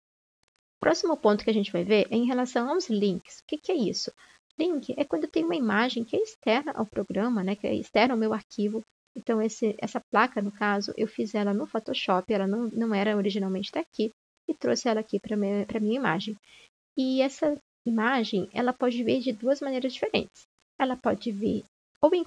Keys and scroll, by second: 10.6 ctrl+z, 13.8 ctrl+z.